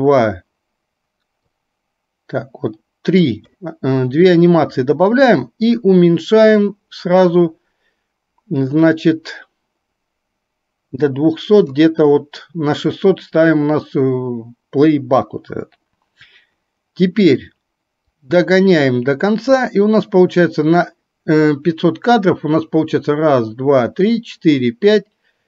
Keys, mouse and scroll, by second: 1.6-3.3 drag, 6.7-11.8 drag, 18.1-19.6 drag.